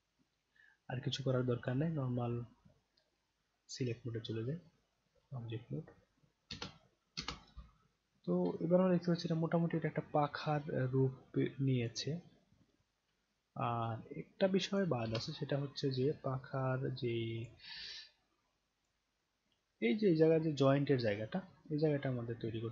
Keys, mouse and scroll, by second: 1.6 click, 4.9-6.0 right drag, 6.5 space, 7.1 space, 8.5-11.9 alt+drag, 13.3 alt+right click, 14.0-14.7 alt+drag, 15.0 space, 17.4 click, 18.8 click.